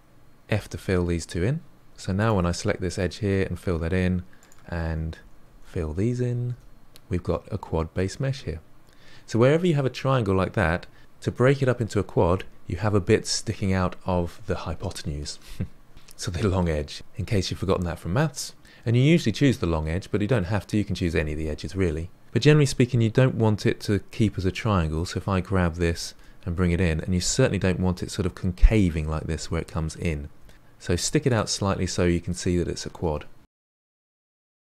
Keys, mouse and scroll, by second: 0.5 f, 1.9 2, 2.1 click, 3.2 f, 4.3 click, 4.8-6.5 typing, 24.7 1, 25.0 click, 26.1 g, 30.3 g, 33.4 middle click, 33.9 click, 34.0 middle click, 34.1-34.7 typing, 34.4 middle click.